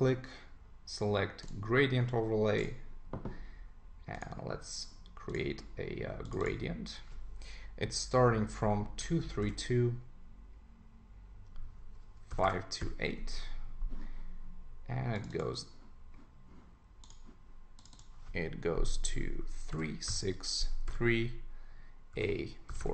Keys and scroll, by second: 13.3 Return.